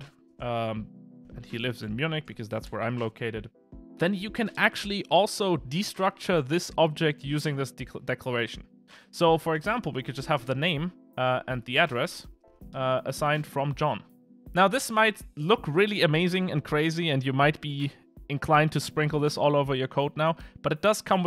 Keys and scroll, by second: 12.8 Return.